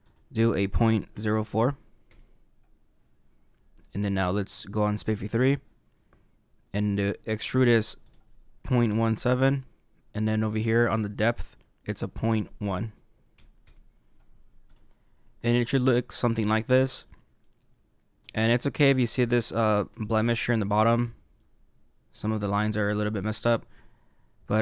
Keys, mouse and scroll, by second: 0.0 click, 5.3 click, 8.0 click, 11.8 click, 14.6 click, 16.1-17.4 scroll up 2, 17.4 middle click, 18.7-19.2 scroll up 4, 19.4-23.0 middle drag.